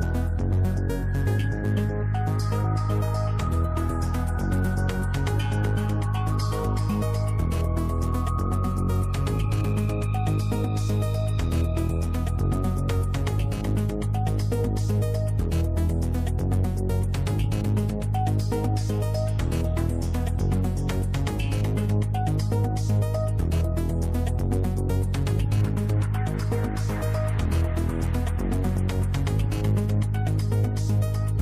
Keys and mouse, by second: 0.0 click, 0.2 middle click, 0.4-8.0 drag, 2.7 t, 11.2 click, 19.2 click, 20.7 click, 24.6 click, 26.6-31.4 drag.